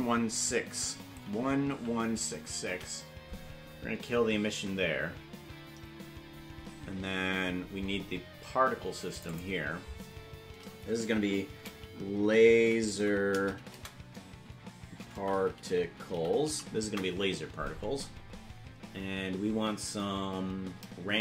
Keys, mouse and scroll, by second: 2.3 KP_6, 9.1 click, 9.3-17.6 drag.